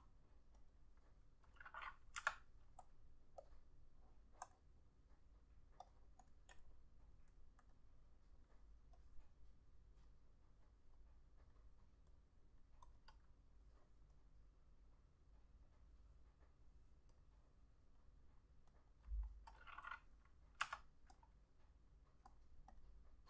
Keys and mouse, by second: 0.8 double click, 2.3 F6, 6.4 double click, 19.0 double click, 20.7 F6.